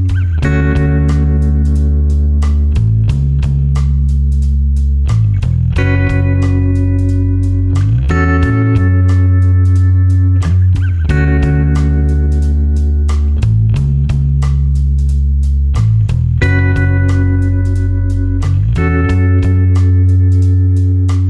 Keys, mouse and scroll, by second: 0.4 space, 0.6 click, 1.0 space, 1.8 click, 5.6 alt+click, 8.2 Delete, 8.7 click, 16.3 click.